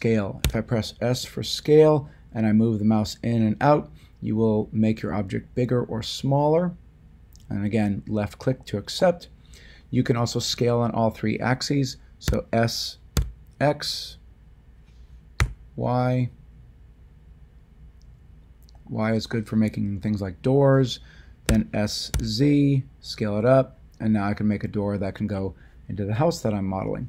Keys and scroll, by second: 0.4 s, 12.2 s, 13.1 x, 15.4 y, 21.4 s, 22.1 z.